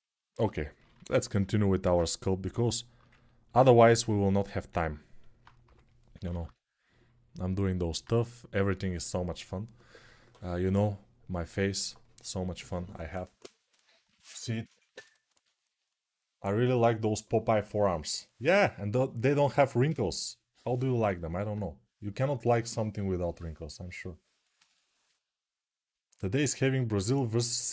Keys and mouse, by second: 5.4 g, 5.9 ], 6.0 ].